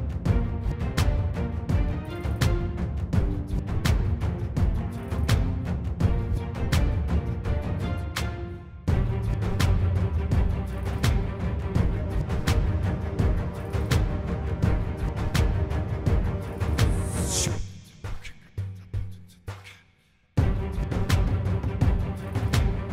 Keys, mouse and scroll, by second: 0.9 middle click, 2.2 middle click, 13.7 middle click, 19.9 middle click, 20.3 middle click.